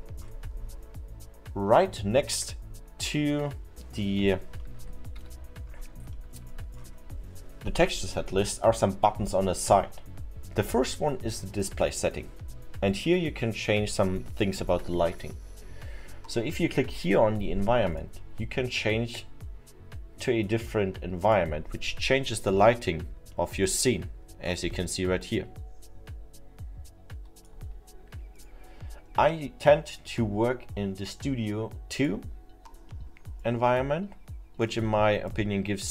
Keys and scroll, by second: 3.4 F6, 5.2 F5.